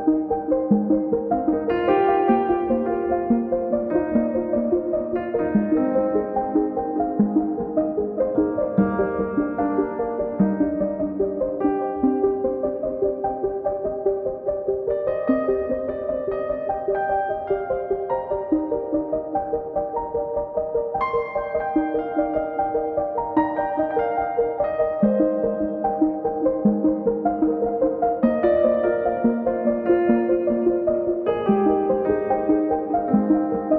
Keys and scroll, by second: 0.9 space, 0.9 Escape, 2.5 b, 9.5 space, 11.9 space, 12.0 Escape, 26.0 m, 29.9 c, 32.1 8, 32.7 Return.